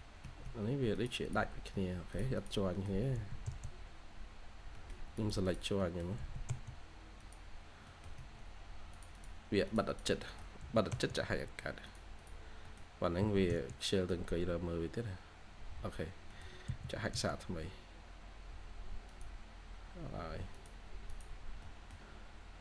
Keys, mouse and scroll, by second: 0.1 Escape, 0.3 Escape, 0.4 scroll down 1, 1.1 double click, 1.6 Escape, 2.3 double click, 2.6 middle click, 3.1 typing, 4.6 middle click, 4.9-5.3 scroll up 1, 5.3 double click, 5.7 middle click, 5.9 scroll down 1, 6.1 typing, 7.5 scroll down 1, 7.8 middle click, 8.1 Escape, 8.4-9.0 scroll up 1, 9.0 double click, 10.1 middle click, 10.5 typing, 12.1 double click, 12.5 middle click, 13.1 typing, 13.6 scroll down 1, 13.9 middle click, 14.3-14.6 scroll up 1, 16.0 scroll down 1, 16.2 middle click, 16.6 h, 17.1 scroll up 1, 17.7 h, 17.9 scroll up 1, 18.3 h, 19.8 scroll up 1, 21.3 scroll down 1, 21.5 middle click, 22.1-22.6 scroll down 1.